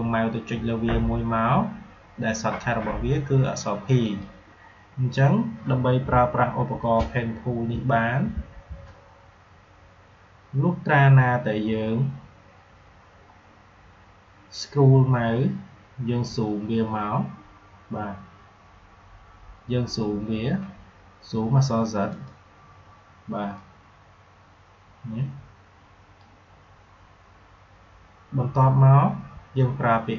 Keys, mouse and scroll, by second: 3.9 click, 22.1-28.6 drag.